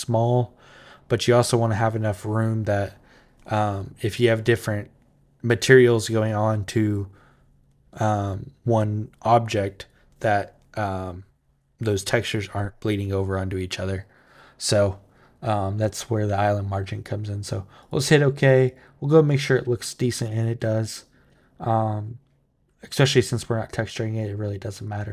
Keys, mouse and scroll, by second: 17.6 click, 18.4 click, 24.6 click.